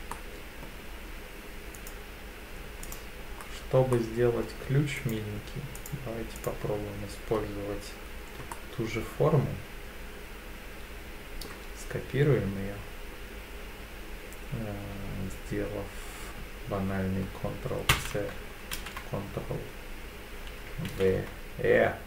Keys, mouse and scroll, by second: 0.1 middle click, 1.7 click, 2.8 alt+click, 3.4-3.8 scroll up 2, 3.9 middle click, 5.0 click, 5.7 click, 6.3 alt+click, 8.5-11.4 middle drag, 17.9 ctrl+c, 18.7 ctrl+v, 20.9 ctrl+v.